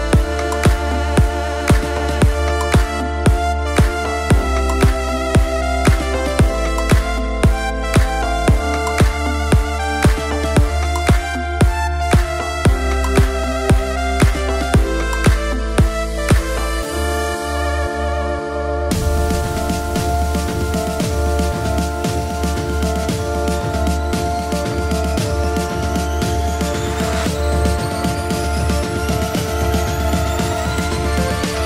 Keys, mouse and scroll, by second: 3.6-5.3 drag, 6.6 Tab, 8.7 click, 9.8-12.3 drag, 13.3 click, 14.2 ctrl+click, 15.0-16.6 drag, 17.3 s, 20.4 click, 20.8-21.3 scroll down 1, 21.5 click, 22.0-24.6 drag, 25.8 shift+middle click, 27.4 shift+click, 28.3 shift+click, 29.2 s, 30.3 click, 31.2-31.6 drag.